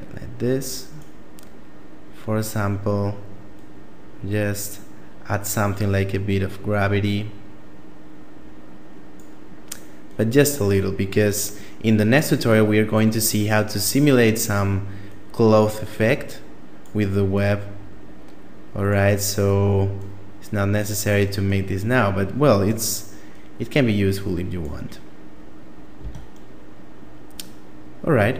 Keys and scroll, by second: 25.3 Tab.